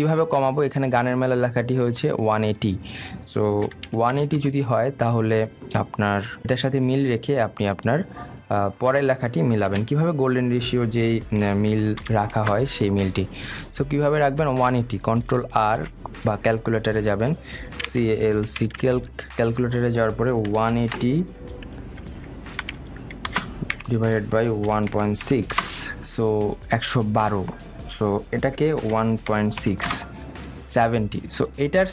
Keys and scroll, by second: 5.6 Return, 13.6 Return, 17.0 super+r, 20.1 Return, 26.8 Return.